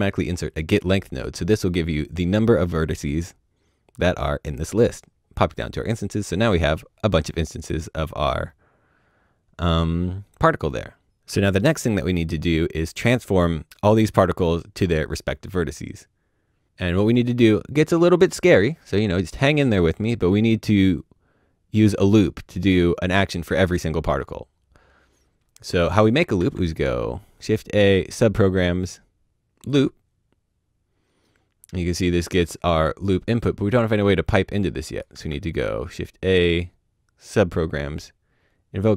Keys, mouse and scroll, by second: 0.5 click, 6.3 click, 7.2-7.7 scroll down 1, 7.7 middle click, 7.8-10.7 scroll down 1, 10.7 middle click, 13.6 click, 15.6 click, 15.6 middle click, 16.0-19.3 scroll down 1, 24.2-25.7 scroll down 1, 25.7 click, 26.4 shift+a, 29.7 click, 31.8 click, 35.0 click, 35.1 shift+a.